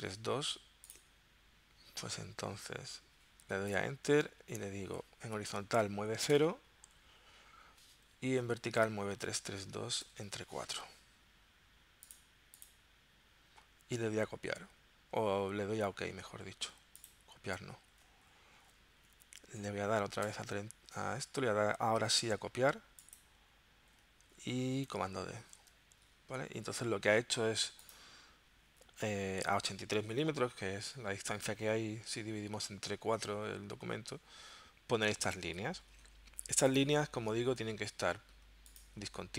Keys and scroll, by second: 2.4 v, 3.7 Return, 5.5 o, 6.3 Tab, 8.2 3, 9.2 2, 10.0 shift+7, 10.3 4, 25.4 super+d.